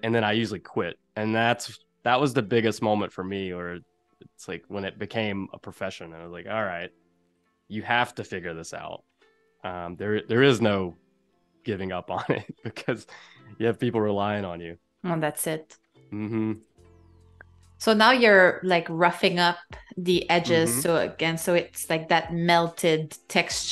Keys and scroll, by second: 9.0 shift+m, 11.1 a, 14.0 super+c, 14.5 super+z, 16.6 BackSpace, 17.7 BackSpace, 18.5 super+f.